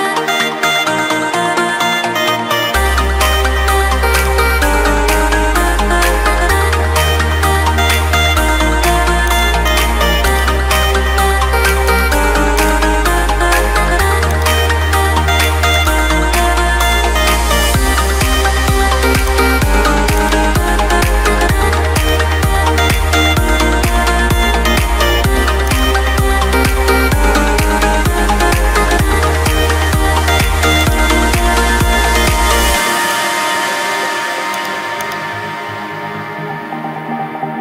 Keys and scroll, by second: 7.5 Return, 18.2 ctrl+t, 23.6 Return.